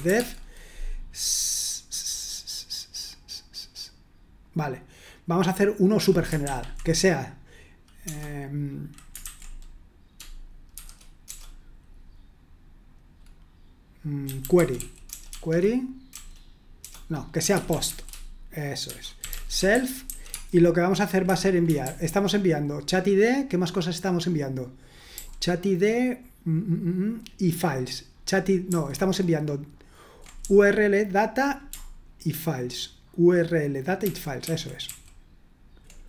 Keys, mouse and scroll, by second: 0.0-0.6 typing, 8.0 BackSpace, 9.2 shift+_, 10.7 shift+(, 14.0-16.1 typing, 17.1-20.6 typing, 21.3 Escape, 21.8 ctrl+u, 34.2-35.0 typing.